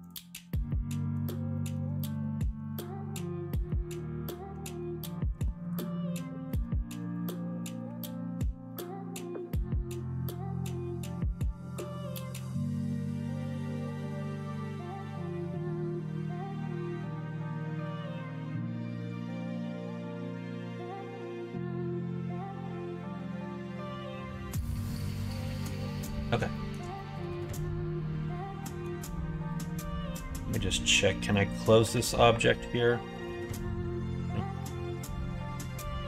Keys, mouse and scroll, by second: 0.0 click, 0.6 middle click, 1.5 middle click, 1.9 shift+middle click, 2.6 middle click, 3.1 middle click, 4.5 Tab, 6.4 ctrl+r, 7.6 middle click, 7.8 1, 8.4 click, 8.6 middle click, 10.8 g, 13.0 click, 13.4 g, 15.4 middle click, 16.1 middle click, 16.4 Tab, 17.6-21.3 middle drag, 22.4 middle click, 23.6 middle click, 24.3 shift+middle click, 25.6 middle click, 26.5 shift+middle click, 26.9-28.8 middle drag, 29.5 click, 29.7 middle click, 31.3 middle click, 31.8 /, 32.2-33.2 middle drag, 33.4 2, 34.6 1, 35.4 Tab.